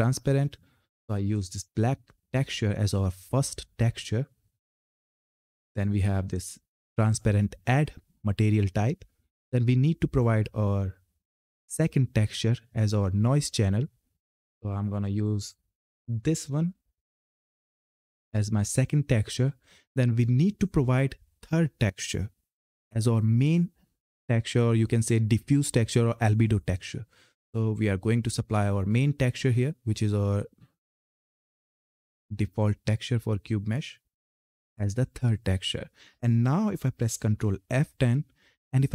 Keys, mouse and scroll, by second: 0.9 click, 4.8 click, 9.8 click, 14.9 click, 27.2 click, 31.3-34.2 drag, 34.4 click, 37.6 ctrl+F10.